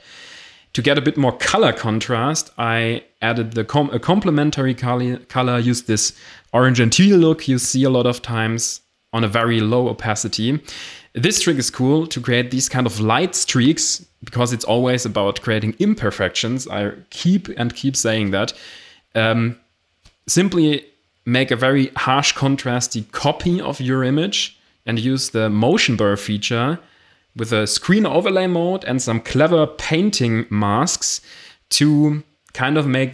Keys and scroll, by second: 5.4 Return, 5.6 Delete, 13.5 ctrl+alt+shift+e, 15.3 ctrl+i, 27.9 Return.